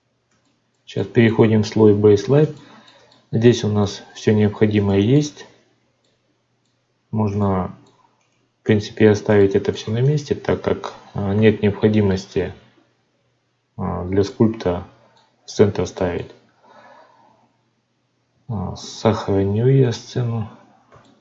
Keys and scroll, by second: 18.6 ctrl+s.